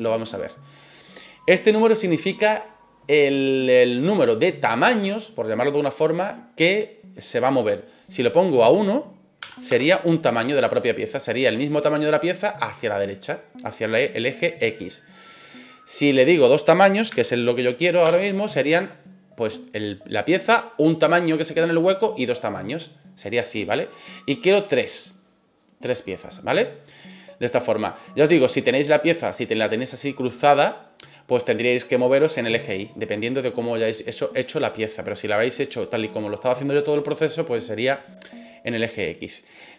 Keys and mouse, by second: 8.5-10.1 drag, 16.3-18.2 drag, 25.0 click, 28.6-29.3 middle drag, 34.6-35.3 middle drag.